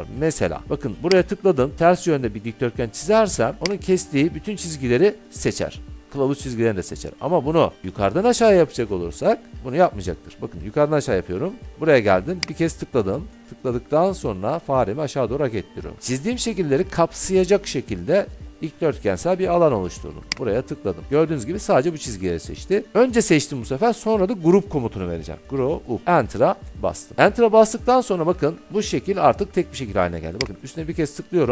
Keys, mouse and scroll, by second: 1.4 click, 3.8 click, 8.0 Escape, 11.4 Escape, 12.6 click, 16.9 click, 20.7-23.9 drag, 25.4-26.1 typing, 26.8 Return, 30.6 click.